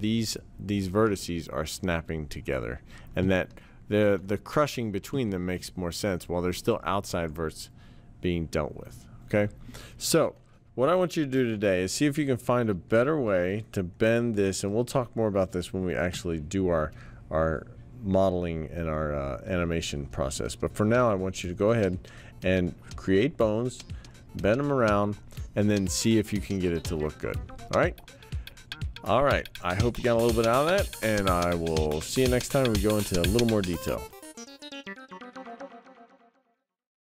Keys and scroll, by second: 16.1 t.